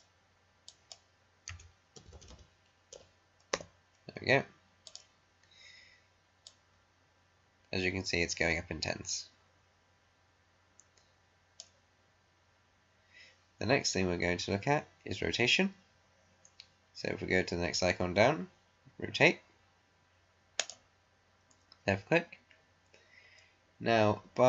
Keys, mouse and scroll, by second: 1.2-2.7 typing, 3.6 Return, 4.8-14.9 drag, 20.5 click.